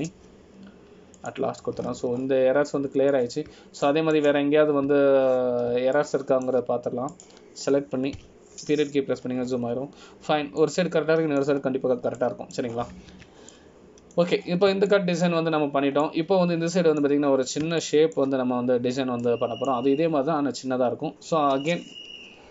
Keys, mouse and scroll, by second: 0.0 click, 0.6 shift+click, 1.7 m, 3.9-4.5 scroll down 11, 4.9 middle click, 5.3-6.0 scroll down 3, 6.0 shift+middle click, 8.1 shift+middle click, 9.3 click, 10.3 KP_Decimal, 11.3-11.7 scroll down 7, 12.2-12.8 scroll down 3, 12.8 middle click, 13.7 scroll down 1, 14.3 middle click, 14.3-15.0 scroll down 3, 15.3 Tab, 15.7 middle click, 16.6 scroll down 1, 17.1 shift+middle click, 17.7 scroll up 1, 18.2 middle click, 19.4-20.1 scroll up 3, 20.0 shift+middle click, 20.6 scroll up 2, 21.4 middle click.